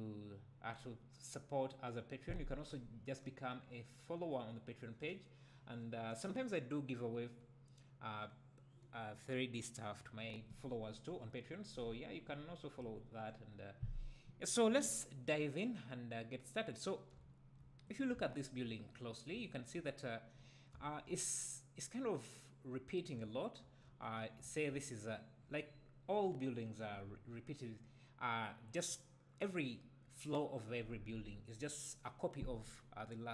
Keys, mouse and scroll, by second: 15.8-16.2 scroll down 2, 16.2-17.2 scroll up 2, 17.2 `, 17.9 click, 18.2 `, 18.9-19.3 scroll up 2, 19.3 `, 20.0-20.4 scroll up 2, 20.4-20.7 scroll down 2, 20.7 `, 24.0-24.4 scroll up 1, 24.4 `, 25.4-29.5 scroll down 1.